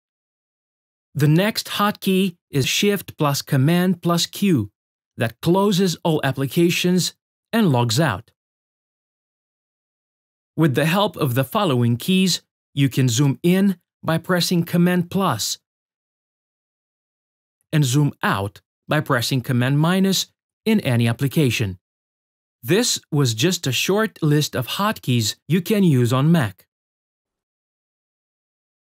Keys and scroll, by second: 0.5 shift+super+q, 10.2 super++, 15.9 super++, 17.5 super+-, 19.3 super+-, 21.4 super+-.